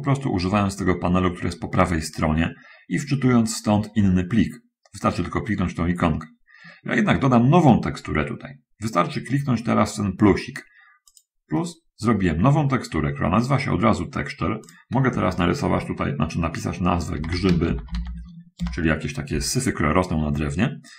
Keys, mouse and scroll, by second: 11.4 click, 17.5-18.0 typing, 18.8 Return.